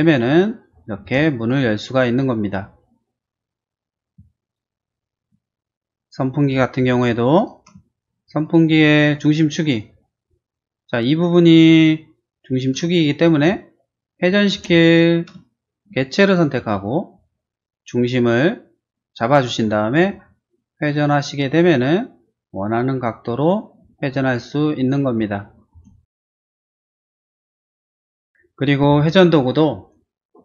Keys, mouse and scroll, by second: 0.4 middle click, 1.0 space, 1.4 click, 4.4 shift+middle click, 5.5 shift+middle click, 5.7 shift+middle click, 7.4 click, 7.8 shift+middle click, 8.4 shift+click, 8.6 shift+click, 9.1 shift+middle click, 10.1 middle click, 10.5 middle click, 10.6 middle click, 13.0 shift+middle click, 13.3-14.3 shift+middle drag, 14.5 shift+space, 14.8 click, 15.4 middle click, 16.7 q, 17.0 middle click, 17.4 middle click, 19.9 middle click, 20.1 middle click, 20.8 click, 23.4 click, 23.8 scroll down 1, 24.4 middle click, 25.2 scroll down 1, 25.7 space, 26.0 middle click, 27.9 click, 28.2 scroll down 1.